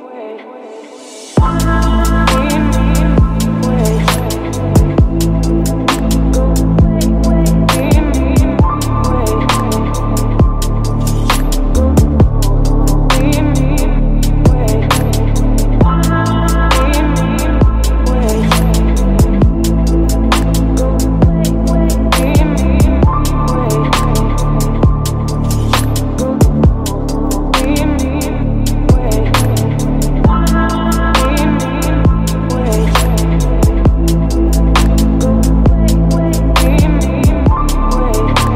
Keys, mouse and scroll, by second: 0.0 shift+-, 1.8-3.9 typing, 5.6-7.0 typing, 8.1 Right, 8.9-11.7 drag, 11.7 F5, 14.3-16.5 drag, 17.6 click, 17.7 Return, 19.9-25.7 typing, 22.9 Return, 23.9 Return, 24.8 Return, 26.3 Return, 28.0-29.4 drag, 29.6 ctrl+c, 30.5 click, 31.6 ctrl+v, 32.3-38.5 drag.